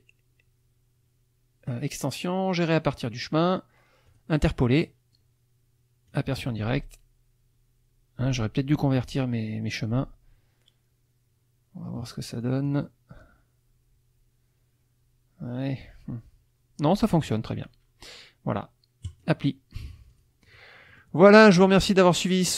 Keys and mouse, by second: 4.1 click, 4.8 click, 6.1 click, 12.4 click, 19.1 click, 20.1 click, 20.5 click, 20.9-21.9 middle drag, 22.1 middle click, 22.4 click.